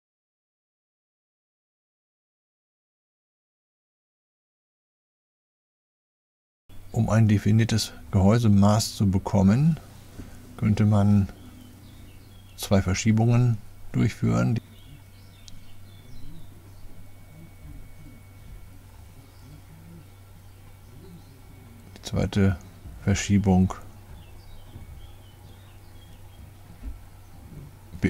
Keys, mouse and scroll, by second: 0.3 Return, 1.0-4.9 typing, 3.9 Return, 6.1 click, 7.1 click, 7.6 click, 10.0 click, 14.0 click, 15.6 middle click, 22.0 click, 22.8 middle click, 25.4 typing, 27.1 typing.